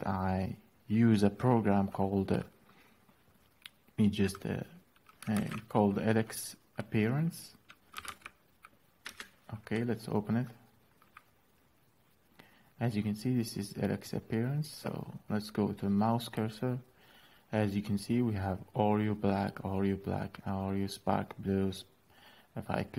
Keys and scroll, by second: 5.0 alt+p, 7.4-8.1 typing, 8.8 Return.